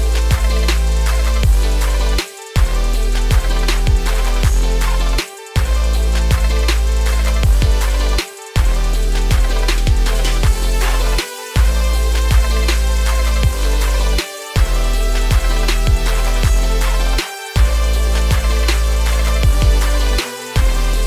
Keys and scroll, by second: 0.2 ctrl+z, 20.9 ctrl+space.